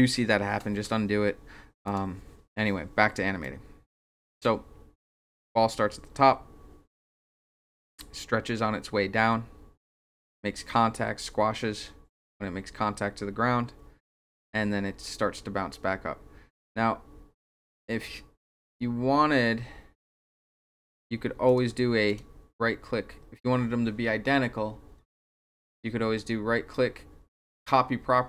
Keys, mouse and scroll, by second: 1.9 click, 3.4-21.0 drag, 21.5 click, 22.1 right click.